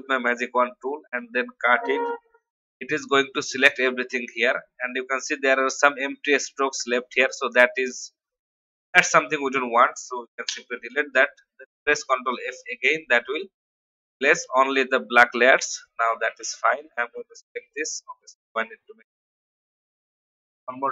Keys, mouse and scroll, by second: 0.5 alt+scroll down 1, 1.1 alt+scroll down 1, 1.9 ctrl+x, 2.7 ctrl+v, 3.3-9.3 drag, 10.4 Delete, 12.4 ctrl+f, 13.4 ctrl+v, 15.4 click, 16.2 alt+scroll down 1, 16.7 click, 18.4 ctrl+z, 18.9 click, 20.3 ctrl+g.